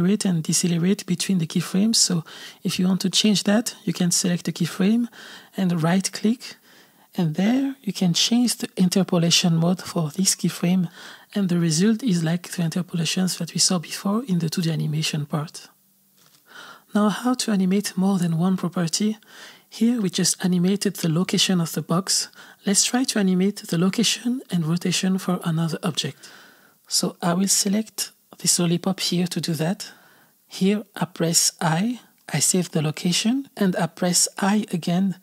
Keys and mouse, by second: 1.9 space, 3.2 click, 5.9-9.5 right drag, 12.1 click, 12.4 space, 14.4 space, 14.6-15.9 drag, 17.9 right click, 17.9 space, 19.1 right click, 20.0 click, 20.3 space, 24.6 space, 26.5 click, 28.6-32.6 drag.